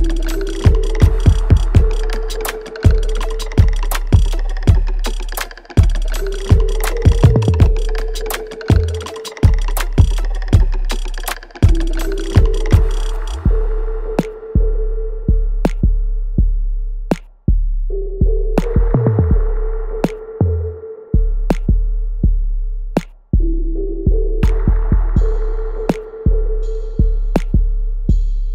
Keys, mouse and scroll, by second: 2.7 ctrl+z, 3.2 alt+right click, 3.5 alt+click, 4.2 alt+middle click, 4.6 alt+right click, 5.4 shift+click, 6.2 alt+right click, 6.5-9.9 alt+drag, 10.4 alt+right click, 11.3 alt+middle click, 11.7-14.4 alt+drag, 14.4 alt+right click, 14.7 alt+middle click, 15.9 click, 16.4 scroll up 1, 17.2-25.4 drag, 25.5 click, 27.8 alt+middle click, 28.3-28.5 alt+right drag.